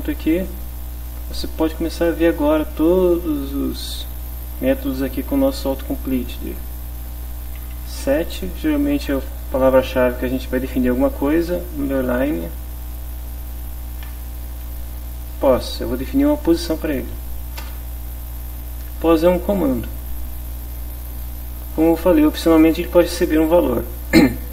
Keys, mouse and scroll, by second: 2.0 Down, 7.5 s, 7.7 e, 8.1 t, 12.1 shift+-, 13.4 p, 14.7 Down, 17.6 Return.